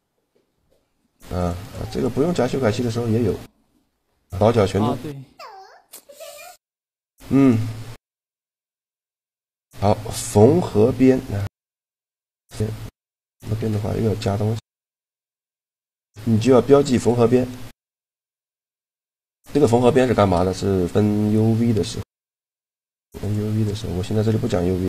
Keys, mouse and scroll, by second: 0.1-2.1 drag, 2.6 Tab, 3.0 Tab, 7.7 a, 8.8 shift+g, 12.6-14.5 right drag, 17.2-19.3 middle drag, 17.7 a, 19.3 click, 19.3-21.4 right drag, 20.2-21.4 drag, 21.4 middle click, 22.2 ctrl+e.